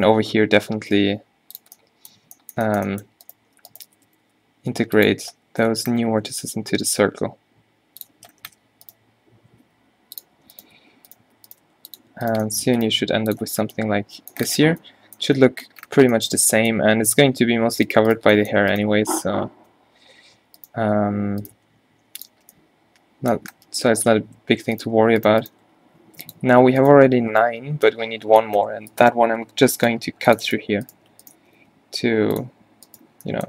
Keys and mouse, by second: 0.2 g, 4.0 g, 5.3 Tab, 5.6 Tab, 6.2 g, 8.2 Tab, 8.5 Tab, 9.7 g, 10.8 g, 11.9 g, 13.0 g, 13.5 Tab, 16.0 Tab, 19.2 q, 20.3 g, 21.5-23.1 drag, 21.6 g, 22.5 Tab, 23.6 Tab, 24.4 Tab, 24.7 Tab, 25.0 g, 25.6 g, 26.6 a, 29.4 g, 30.1 ctrl+r, 31.5 g.